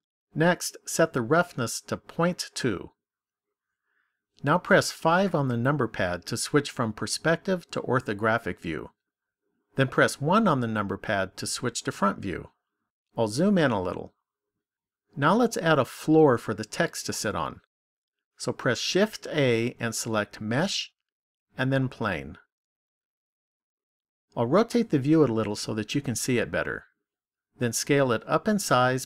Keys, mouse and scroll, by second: 0.8 click, 4.8 KP_5, 10.2 KP_1, 12.3-13.9 scroll up 3, 13.9 shift+middle click, 18.9 shift+a, 24.2 middle click.